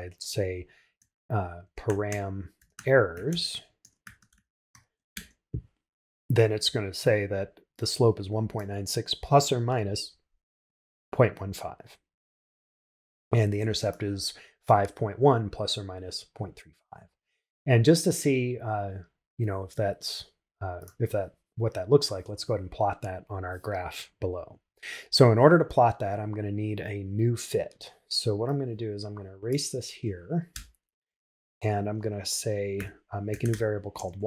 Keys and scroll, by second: 3.8 shift+e, 5.1 shift+Return.